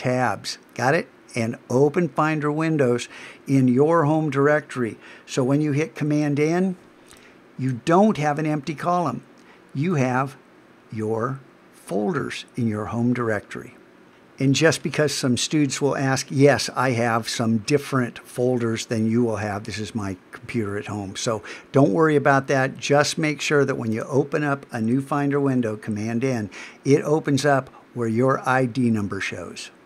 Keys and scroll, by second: 6.0 super+n, 25.4 super+n.